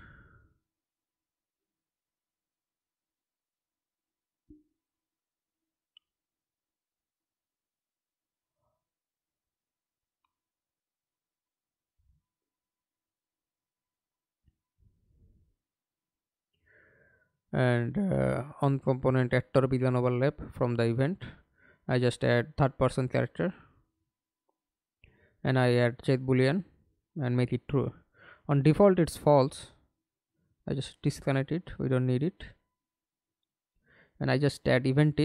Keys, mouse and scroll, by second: 5.6 right click, 6.3 right click, 11.8-12.8 scroll up 3, 16.5-19.5 typing, 20.4 Up, 21.2 Return, 23.1 right click, 24.5 double click, 28.0 right click, 28.9 right click, 30.3 alt+click, 30.8 right click, 31.5 right click, 32.1-33.6 typing, 33.8 Return, 34.6-34.9 scroll up 2.